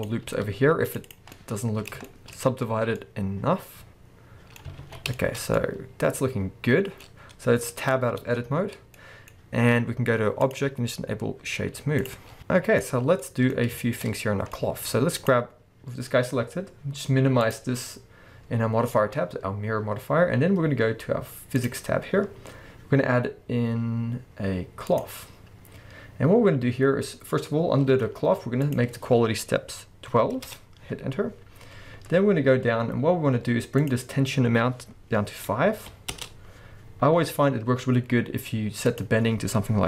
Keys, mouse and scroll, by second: 0.0 click, 0.2 ctrl+r, 1.1 click, 1.4-10.4 middle drag, 2.7-3.0 scroll down 2, 4.8 a, 8.2 Tab, 9.5-10.4 scroll up 2, 10.4-12.4 drag, 12.3 scroll down 2, 12.4-15.2 middle drag, 12.8-13.2 scroll up 2, 13.6-14.5 scroll up 2, 15.2 click, 15.9-16.7 scroll down 1, 17.4 click, 21.6 click, 24.9-39.8 drag, 26.5-26.9 scroll down 1, 26.9-27.4 scroll up 1, 30.5 Return, 31.9-32.4 scroll up 1, 32.4 scroll down 1, 36.3 Return.